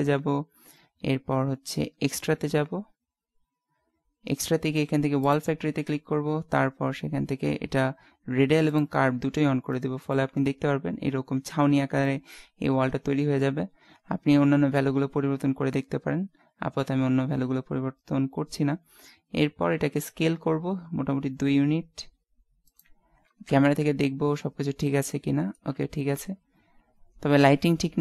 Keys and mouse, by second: 7.2-8.8 middle drag, 8.8 click, 12.1-13.1 middle drag, 14.2 middle click, 19.8 s, 23.5 KP_0, 24.4 middle click, 25.8 shift+z.